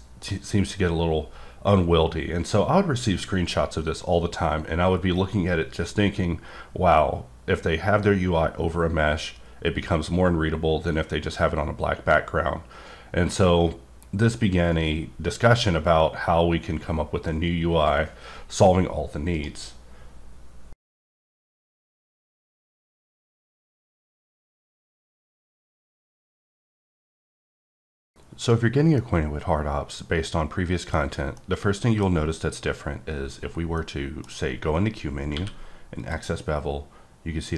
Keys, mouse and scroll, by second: 19.3 right click, 30.9-31.3 scroll down 2, 31.3 middle click, 32.0 scroll down 1, 33.8 middle click, 35.3 q, 35.9 click.